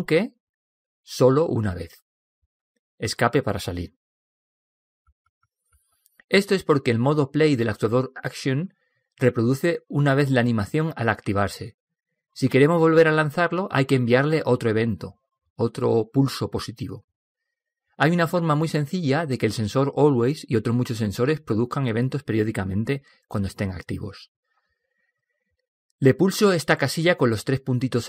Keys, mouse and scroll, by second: 1.0 p, 2.6 p.